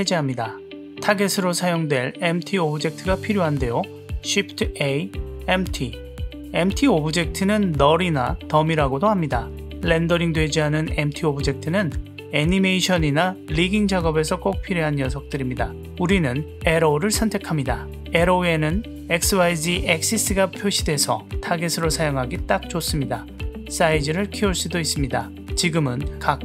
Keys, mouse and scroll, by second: 1.2 n, 1.7 click, 2.5 click, 4.0 shift+a, 23.8 click, 25.6 drag, 26.3 click.